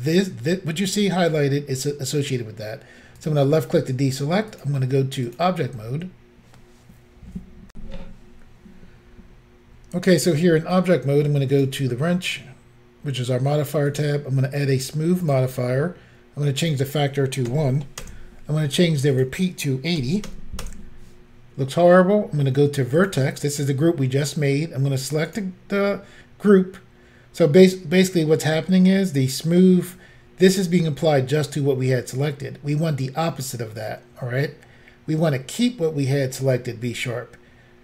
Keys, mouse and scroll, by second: 3.2 click, 3.3 click, 4.5 click, 4.6 click, 5.3 click, 5.4 click, 7.7 Insert, 11.5 click, 13.9 click, 15.2 click, 16.6 click, 16.7 click, 17.5 1, 18.0 Return, 19.2 click, 20.0 typing, 20.7 Return, 23.0 click, 23.1 click, 25.3 click, 25.4 click.